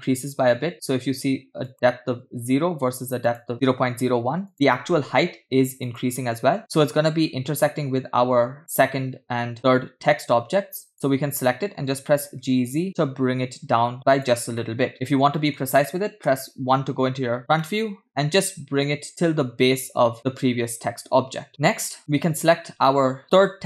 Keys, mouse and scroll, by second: 1.7 click, 3.5 click, 4.5 click, 6.0 click, 8.6 click, 9.7 click, 11.9 click, 12.4 g, 14.6-15.1 middle drag, 15.4 middle click, 16.2 KP_1, 17.4 scroll up 5, 17.6-18.0 shift+middle drag, 18.0 scroll up 1, 19.0 g, 21.5 middle click, 21.5-21.9 scroll down 6, 22.1 click.